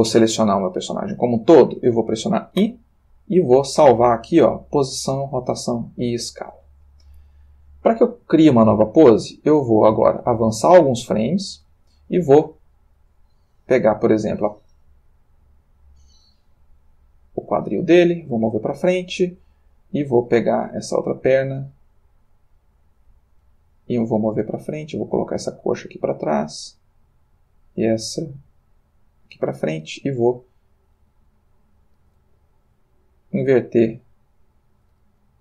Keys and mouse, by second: 0.2 a, 2.7 i, 5.3 click, 9.1-12.2 drag, 12.9 click, 13.9 g, 18.1 click, 19.2 click, 20.4 g, 23.3 click, 24.2 click, 24.8 g, 26.5 click, 27.3 click, 27.8 g, 29.0 click, 30.7 click, 32.2 r, 33.8 click, 34.7 click, 35.0 r.